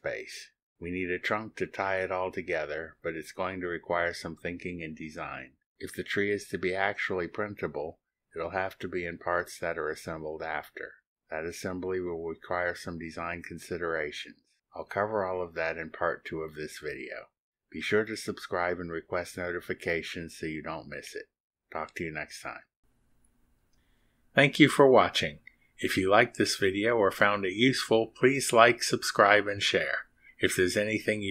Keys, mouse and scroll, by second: 9.9-11.3 drag, 11.3 scroll up 1, 11.7 scroll down 1, 12.4 scroll down 2, 13.6 middle click, 13.8 click, 13.9-16.0 middle drag.